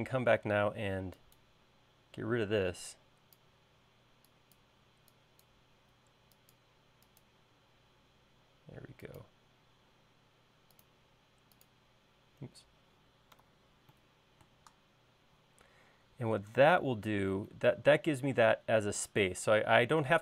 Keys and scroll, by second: 10.4 |, 13.9 super+z.